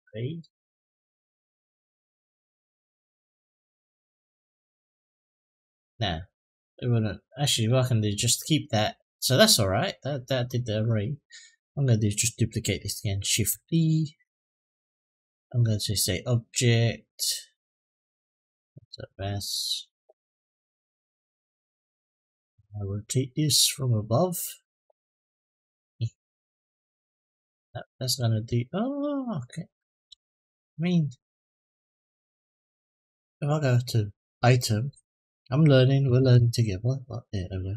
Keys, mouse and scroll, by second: 3.6-4.7 drag, 7.0 click, 10.9 click, 11.4 click, 13.3 shift+d, 15.6-18.2 drag, 20.3-21.6 middle drag, 22.3 middle drag, 23.4 click, 24.1-24.7 scroll down 3, 25.3 click, 26.3-27.5 drag, 27.7 ctrl+z, 28.8 click, 29.7 ctrl+z, 30.4-32.2 drag, 34.2 click, 35.0-36.1 drag.